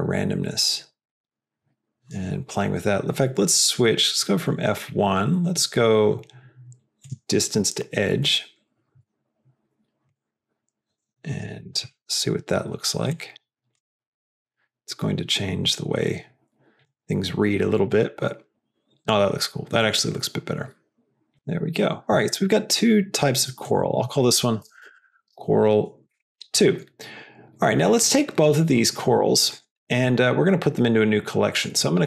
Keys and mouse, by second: 3.6-7.3 drag, 10.1-11.3 drag, 13.0-13.7 drag, 14.1-16.8 drag, 17.8-19.0 drag, 19.7-21.3 drag, 21.3 s, 21.3 g, 23.7-26.8 drag, 29.4 shift+click, 31.4 click.